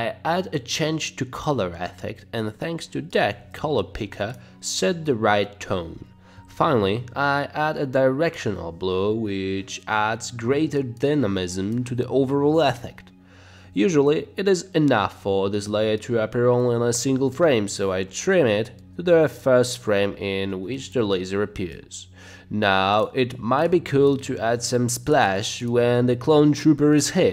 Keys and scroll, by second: 3.0-4.0 typing, 5.8 Down, 5.9 Up, 6.3 Right, 6.8 Up, 9.0 [, 9.2 ], 9.4 [, 14.0 space, 14.2 space, 17.5 space, 18.3 space, 19.4 space, 24.5 space, 25.7 space, 26.1 space.